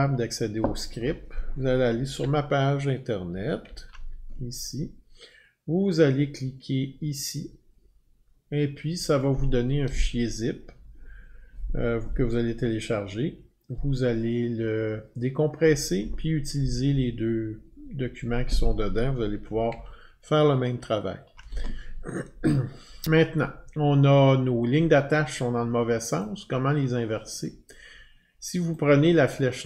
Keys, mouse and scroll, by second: 2.2 alt+Tab, 3.2 alt+Tab, 3.6 alt+Tab, 19.7 alt+Tab, 26.2 click, 28.7 click.